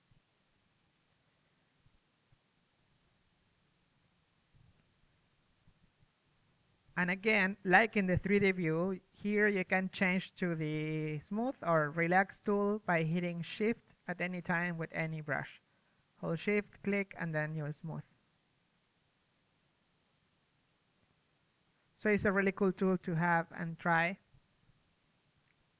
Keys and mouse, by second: 1.1 ctrl+z, 1.4-4.2 drag, 1.7 f, 2.3 shift+f, 5.2 ctrl+z, 6.1-8.2 drag, 9.2 ctrl+z, 10.0-14.5 drag, 11.4 ctrl+z, 14.5 f, 16.2 ctrl+z, 18.8 ctrl+z, 20.7 ctrl+z, 22.2 ctrl+z, 25.2 middle drag.